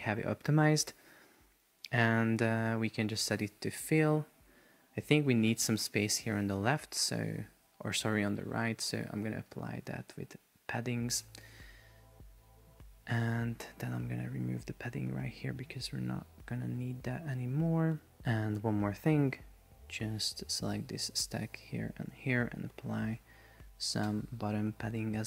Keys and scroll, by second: 5.6 shift+super+4, 6.3 Escape, 24.1 Return.